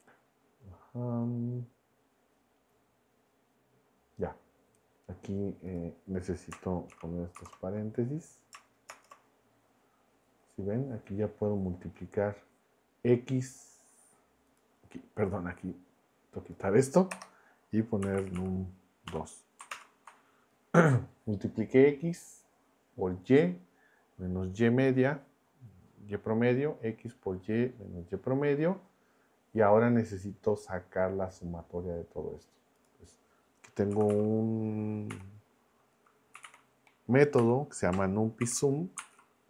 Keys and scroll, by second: 6.9 shift+9, 7.3 shift+0, 8.9 shift+Return, 17.1-19.1 typing, 19.7 ctrl+Return, 33.7-35.1 typing, 36.1-37.4 typing, 38.4 shift+9, 39.0 super+Right.